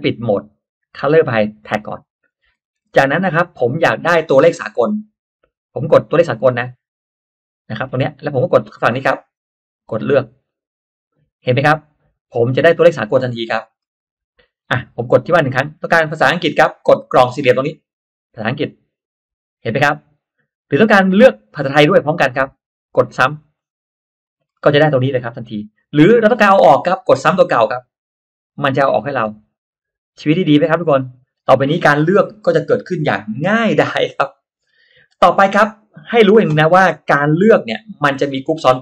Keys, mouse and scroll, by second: 1.0 click, 2.2-2.6 scroll down 1, 2.6 middle click, 3.2 click, 6.6 click, 10.4 click, 11.6-12.6 scroll up 2, 13.5-14.1 scroll down 1, 14.5 click, 18.8 click, 23.5 click, 24.4 middle click, 25.0 middle click, 27.8 click, 29.0 click, 29.7 click, 30.4 click, 31.0-31.4 scroll down 1, 35.5 click, 36.0-36.6 drag, 36.8-37.1 scroll up 1, 36.9 middle click, 37.1-37.4 scroll down 1, 37.8-38.8 drag.